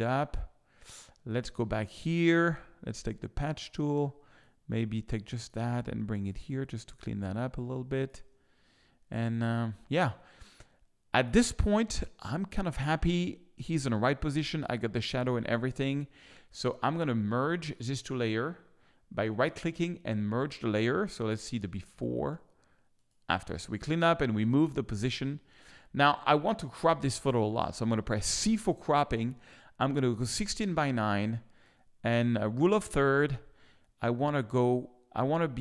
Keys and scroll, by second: 7.5 space, 28.3 c.